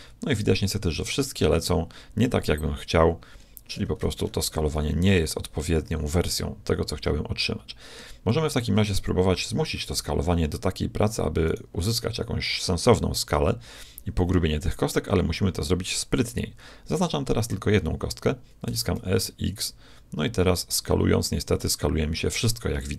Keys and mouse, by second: 4.2 middle click, 7.0 middle click, 9.4 KP_7, 11.4-13.3 drag, 18.7 s.